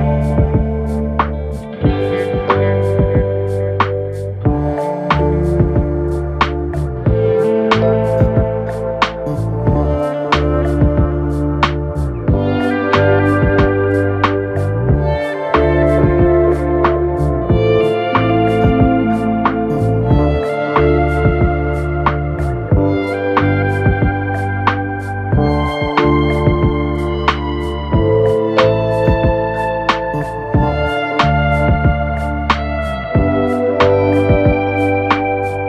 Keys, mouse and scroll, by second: 0.2-1.3 drag, 1.3-2.4 shift+middle drag, 2.4 click, 3.5 click, 4.0-5.9 drag, 5.9 g, 12.9 KP_1, 13.5 2, 14.3 drag, 15.2 shift+click, 16.1 f, 16.8 KP_3, 17.5-18.7 shift+middle drag, 18.7 ctrl+r, 22.7 1, 24.2 ctrl+KP_Subtract, 25.2 g, 30.4 KP_1, 31.3-32.5 scroll up 1, 33.0 2, 33.6 click, 34.5-35.6 typing.